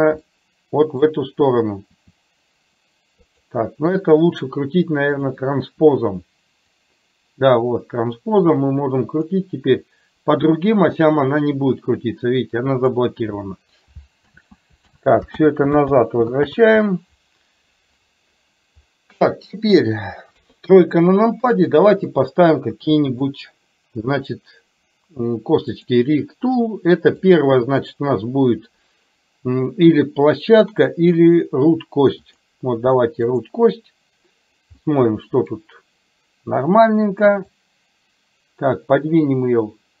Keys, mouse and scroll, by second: 0.4 middle click, 2.1 r, 7.0-9.4 drag, 10.4-13.0 drag, 14.4 ctrl+z, 14.9 ctrl+z, 15.5 ctrl+z, 16.0 ctrl+z, 16.5 ctrl+z, 19.0-19.4 middle drag, 20.4 KP_3, 22.2 click, 27.4-32.5 drag, 33.4 click, 34.9-35.6 middle drag, 37.6-40.0 drag.